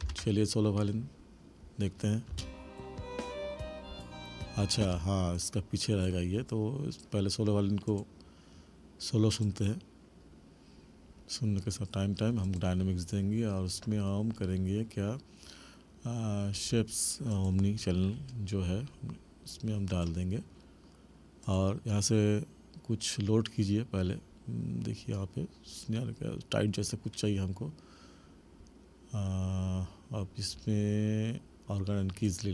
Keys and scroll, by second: 0.0 ctrl+=, 2.3 space, 4.8 space.